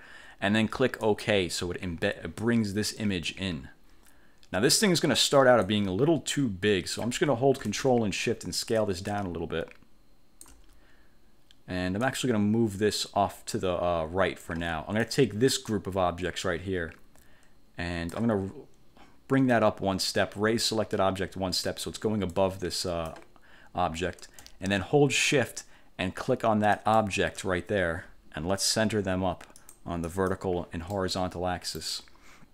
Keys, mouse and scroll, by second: 1.1 click, 2.5-5.5 drag, 5.7-7.3 drag, 8.9-10.8 ctrl+shift+drag, 12.2-14.8 drag, 15.1 click, 15.8-18.5 drag, 21.8 click, 22.5 click, 26.9 shift+click, 29.7 click, 30.2 click, 31.1 middle click, 31.7 click.